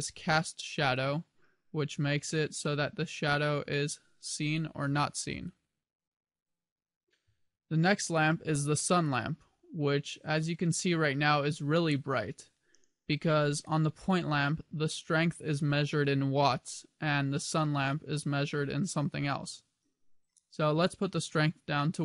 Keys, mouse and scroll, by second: 0.9 click, 1.7 click, 3.8 click, 5.1 click, 8.7 click, 13.6 click.